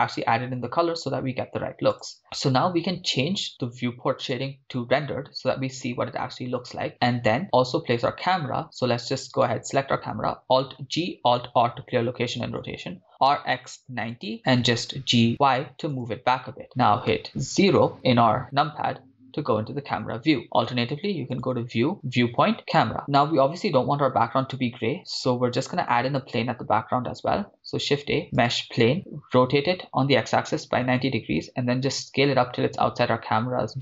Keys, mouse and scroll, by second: 1.9 click, 4.3 click, 7.8-9.5 scroll down 3, 9.5 scroll down 2, 9.5 click, 9.5 right click, 10.8 alt+g, 11.6 alt+r, 12.9-14.9 typing, 14.1 Return, 15.9 click, 17.0 KP_0, 21.3-23.0 drag, 27.5 shift+a, 29.4 r, 30.1 x, 30.4 9, 30.5 0, 30.8 Return, 31.6 s.